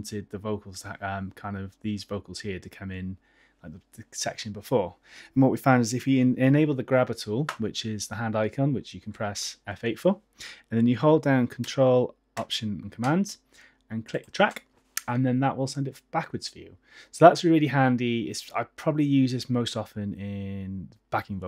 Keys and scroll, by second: 9.3 F8.